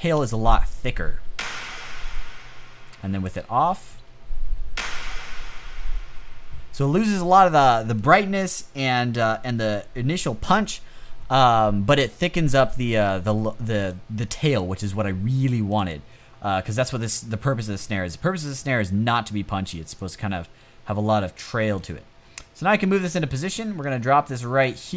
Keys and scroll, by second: 0.7 space, 3.5 space, 6.2 space.